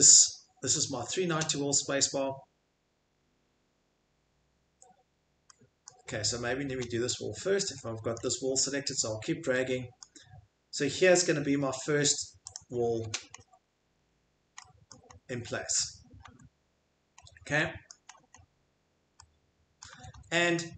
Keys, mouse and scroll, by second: 0.6 middle click, 0.7 middle click, 1.2 scroll, 5.9 middle click, 6.0 middle click, 6.1 middle click, 6.7-8.1 scroll, 8.1 middle click, 8.3 middle click, 8.3 middle click, 12.5 middle click, 12.5 click, 13.0-14.3 scroll, 13.7 Escape, 14.8-16.4 scroll, 16.2 Escape, 17.1 scroll, 17.8-18.9 scroll, 19.8 click, 19.9 Escape, 20.1 Escape.